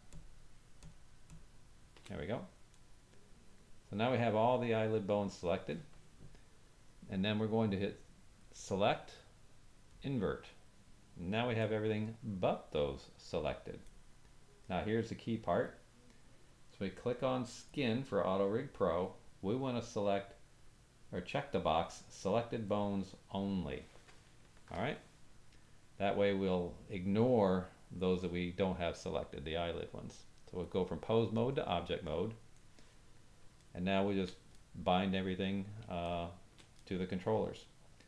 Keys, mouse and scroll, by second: 0.1 shift+click, 0.8 shift+click, 1.2 shift+click, 2.7 middle click, 8.4-13.8 drag, 11.6 middle click, 13.8-17.7 middle drag, 17.7 click, 22.7 click, 30.6 click, 32.5 middle click, 33.6 ctrl+middle click, 34.5 middle click, 36.0-38.0 shift+middle drag.